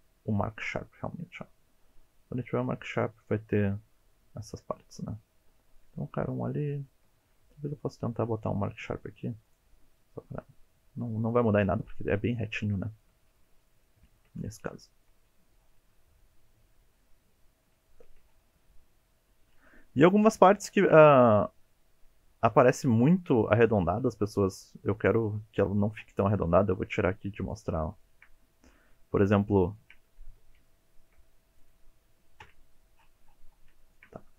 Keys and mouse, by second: 1.7-2.6 middle drag, 3.7 middle click, 4.7 shift+middle click, 5.1 shift+middle click, 5.9 shift+middle drag, 6.3 shift+middle click, 6.7 shift+middle click, 9.9-11.3 middle drag, 12.8 shift+middle click, 13.7 middle click, 14.0 shift+middle drag, 14.8 shift+middle drag, 16.2-17.6 middle drag, 17.8 shift+middle click, 18.8 middle click, 20.0 2, 20.4 shift+middle click, 27.5 click, 28.0 shift+middle click, 28.9 middle click, 29.5 shift+middle click, 30.3 1, 30.7 shift+middle click, 32.4 KP_Decimal, 33.8 shift+middle click.